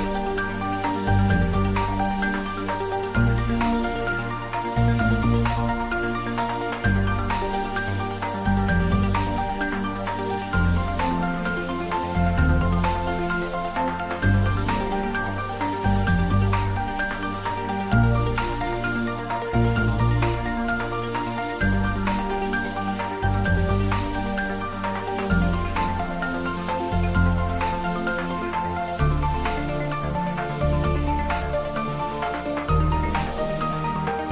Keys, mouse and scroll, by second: 6.7 Tab, 7.8 scroll up 1, 10.0 click, 22.2 click, 23.9 Tab, 24.8 click, 26.1 alt+shift+click, 30.2 alt+shift+click.